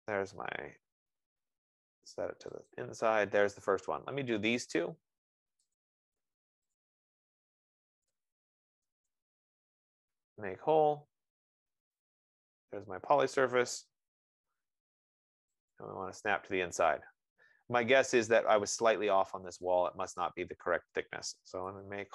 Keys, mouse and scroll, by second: 3.1 click, 3.5 F15, 4.4 Return, 4.7 scroll, 5.3-6.0 scroll, 6.0 click, 7.4 click, 8.1-12.1 typing, 9.6-10.2 scroll, 12.3 click, 16.2 click, 18.7 click, 21.8-22.1 typing.